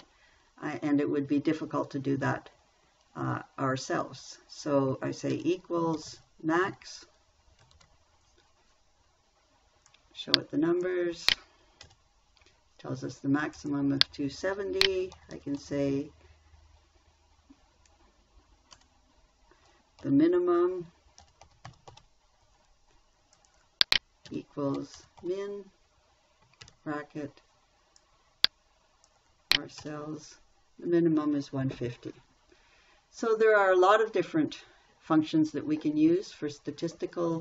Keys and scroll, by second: 5.7 =, 6.4 m, 6.5 a, 7.1 x, 8.1 shift+9, 12.2 Return, 15.6 shift+m, 15.8 i, 19.2 BackSpace, 20.4 n, 21.7 i, 21.8 m, 22.1 u, 22.3 m, 24.7 =, 25.2 m, 25.4 i, 25.6 n, 27.0 shift+9, 30.2 Return.